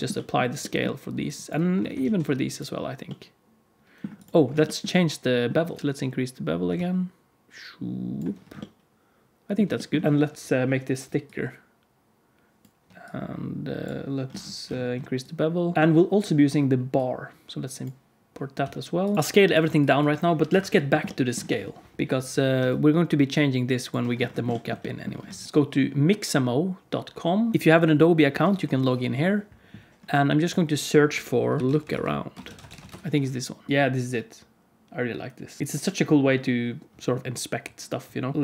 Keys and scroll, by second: 1.9 ctrl+a, 15.7 alt+a, 18.5 s, 20.4 KP_Decimal, 25.3 alt+a.